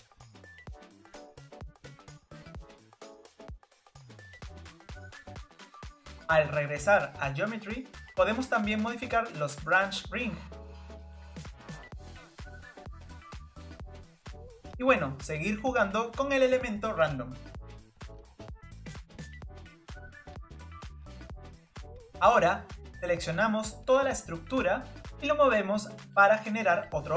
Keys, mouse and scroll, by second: 2.0-11.0 drag, 11.7-13.8 drag, 13.8 scroll down 2, 14.5-18.0 shift+middle drag, 18.0-19.7 drag, 20.5 click, 20.7 click, 21.3 scroll down 1, 21.3 shift+middle click, 21.7 click, 22.1 click, 23.3-25.4 middle drag, 25.4-26.8 drag.